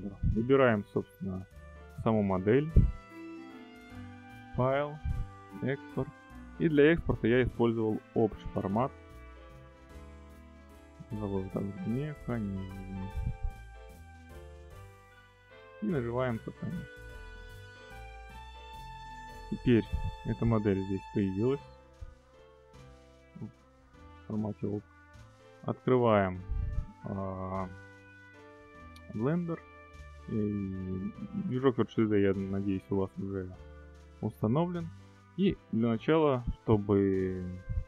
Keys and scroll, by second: 12.0-13.1 typing.